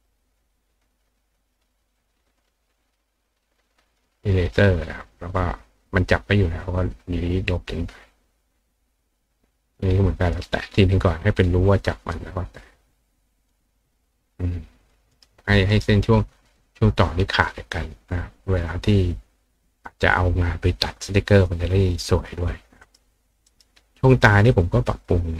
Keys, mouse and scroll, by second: 6.6-8.6 drag, 10.2 click, 11.4-13.5 drag, 14.8 click, 15.1 right click, 15.7 right click, 22.8 right click, 23.4 right click, 24.5 click.